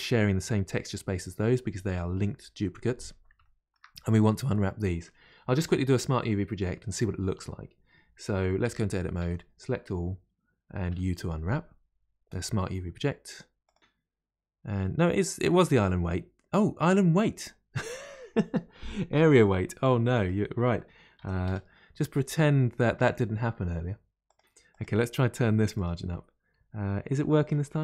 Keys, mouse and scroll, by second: 3.4-27.8 shift+middle drag.